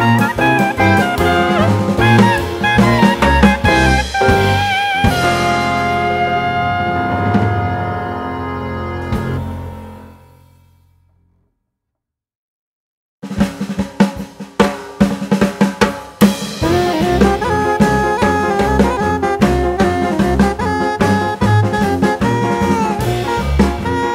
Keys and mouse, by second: 0.4-1.7 drag, 2.6-3.9 drag, 5.6-7.2 drag, 8.2-9.4 drag, 10.4 click, 13.2 click, 14.2-15.8 drag, 16.6-18.0 drag, 20.1-21.5 drag, 22.2-23.2 drag.